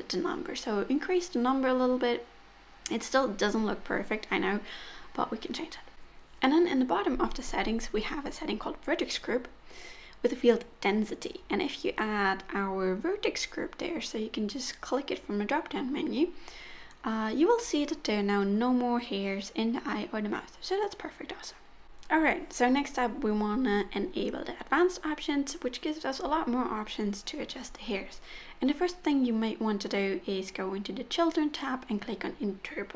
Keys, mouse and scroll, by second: 1.6 click, 2.8-3.8 scroll down 1, 3.8 click, 6.4 middle click, 8.6 middle click, 11.4 middle click, 14.1 middle click, 14.9 Tab, 14.9 click, 14.9 middle click, 20.3 click, 22.1-23.3 scroll down 1, 26.7 click, 27.6-28.5 scroll down 1, 28.5 click, 29.3 middle click, 31.6 middle click.